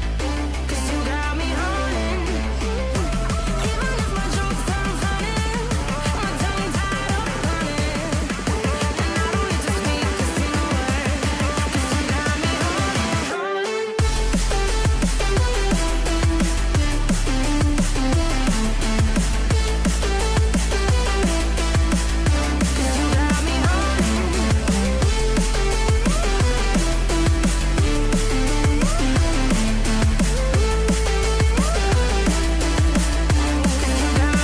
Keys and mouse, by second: 1.4 click, 2.0 g, 5.2 KP_3, 7.4 click, 9.5 KP_3, 9.9 r, 12.3 g, 14.0 click, 14.1 g, 15.3 g, 16.0 r, 16.8 ctrl+z, 17.0 r, 18.1 g, 19.3 click, 20.7 click, 21.2 r, 23.2 g, 29.5 click, 30.0 g, 32.5 g, 33.7 g.